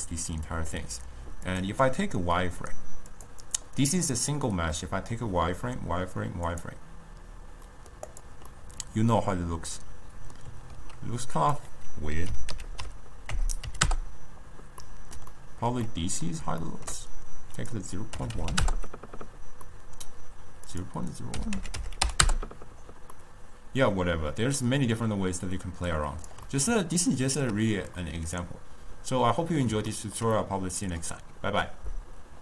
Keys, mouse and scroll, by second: 1.5 click, 3.2 click, 3.5 click, 4.1-7.2 drag, 7.7-8.2 middle drag, 8.2 click, 8.6-11.5 middle drag, 11.5-14.5 drag, 14.9-17.7 middle drag, 17.7-19.7 drag, 19.7-20.8 middle drag, 20.8-23.2 drag, 23.2-26.0 middle drag, 26.0 click, 26.6-32.4 middle drag.